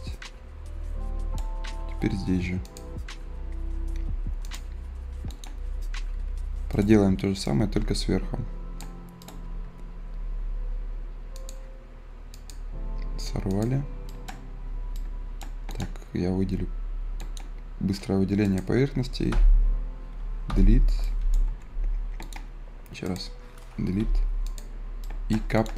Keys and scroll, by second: 19.2 Delete, 20.4 Delete, 21.5 Escape, 23.9 Delete.